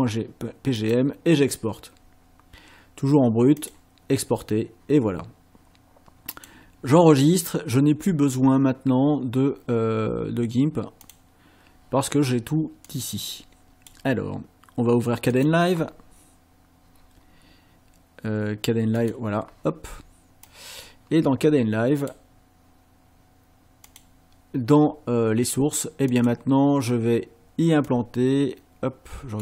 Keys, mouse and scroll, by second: 0.8 click, 3.6 click, 6.3 click, 7.7 click, 11.1 click, 12.9-14.1 drag, 15.4 click, 19.0 click, 20.5-22.3 drag, 23.9 click, 26.1 click, 27.9-29.4 drag.